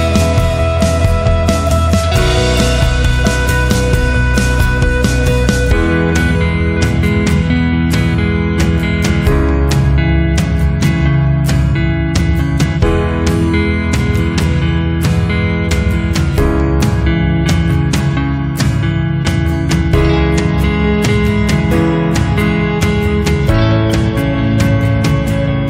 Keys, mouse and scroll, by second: 1.6 click, 3.8 click, 5.2 click, 9.7 click, 10.9 click, 12.6 click, 16.9 click, 19.3 click.